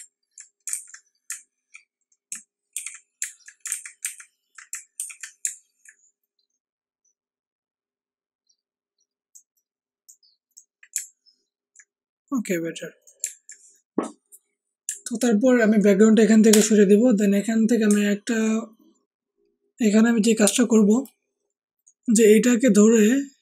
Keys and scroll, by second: 0.7 ctrl+alt+z, 2.7 d, 4.7 z, 5.4 z, 16.5 BackSpace.